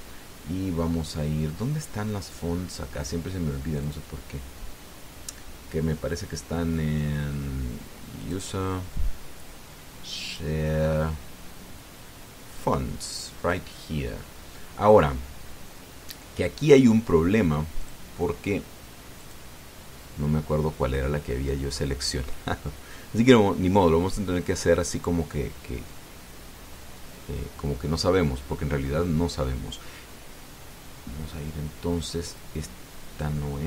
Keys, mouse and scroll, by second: 4.6 click, 9.0 click, 11.0 click, 13.3 click, 18.6 click, 20.0 click, 22.6 scroll down 1, 23.3-24.2 scroll down 1, 24.6-25.9 scroll down 2, 26.2 scroll down 1, 28.0-29.6 scroll up 5.